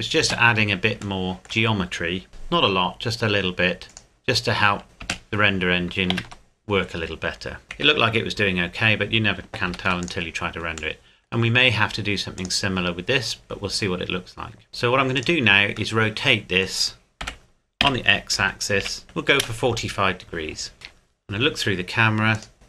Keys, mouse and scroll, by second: 0.2 space, 1.2 shift+middle click, 2.3 k, 5.0 space, 6.3 ctrl+z, 7.6 Tab, 7.8 KP_7, 8.7-9.4 scroll down 1, 9.7 ctrl+s, 10.0 click, 11.0 middle click, 11.3-12.4 scroll up 1, 12.4 click, 13.0-13.7 scroll up 1, 14.7-15.2 scroll down 1, 15.2 right click, 15.9 middle click, 17.2 r, 17.8 x, 18.4 KP_4, 18.8 KP_5, 19.4 KP_Enter, 20.7 scroll up 1, 20.8 KP_0, 21.6-22.3 scroll down 1, 22.3 right click, 22.5 shift+click.